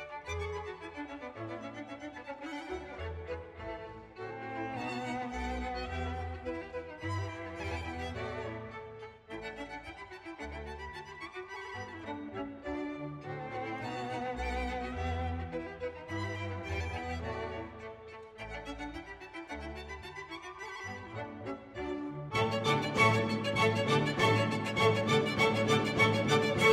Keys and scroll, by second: 2.6 ctrl+v.